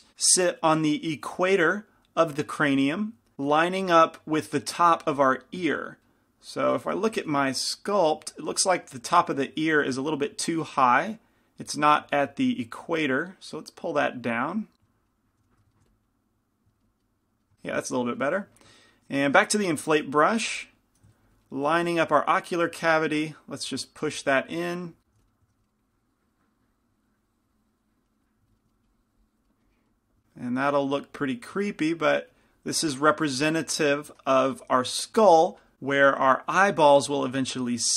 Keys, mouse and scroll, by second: 7.5 g, 7.5 f, 9.7 f, 10.0-15.5 drag, 12.2 f, 15.5 f, 15.9 f, 16.1-17.3 drag, 17.3-24.2 middle drag, 20.5 i, 20.5 f, 21.8 f, 24.2 click, 24.4 f, 24.7-28.3 middle drag, 25.2 f, 28.5 middle click, 29.4 click, 31.5-34.4 drag, 37.8-37.9 drag.